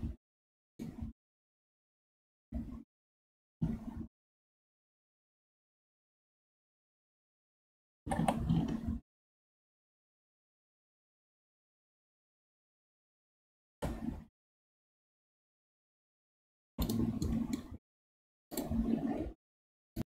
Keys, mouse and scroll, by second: 0.8-3.8 middle drag, 6.3-8.0 middle drag, 8.0 g, 17.2-18.6 middle drag.